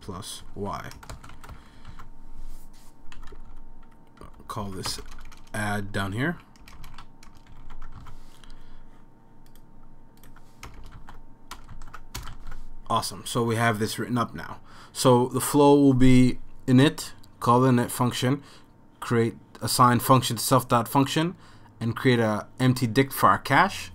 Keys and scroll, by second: 0.0-2.0 typing, 3.3 Down, 3.5 Down, 4.2 Down, 4.6 Left, 4.9-8.0 typing, 9.3 super+s, 10.7 BackSpace, 10.8 BackSpace, 11.0 super+s, 11.7 super+s, 12.3 super+s, 12.3 Return.